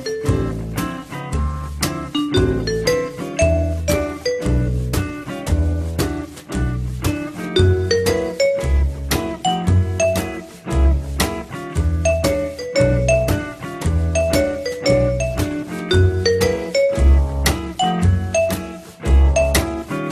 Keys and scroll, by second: 9.9 F3.